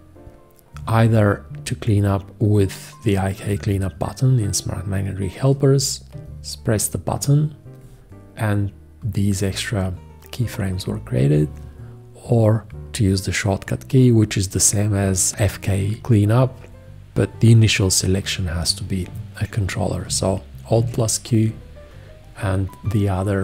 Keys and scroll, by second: 20.7 alt+q.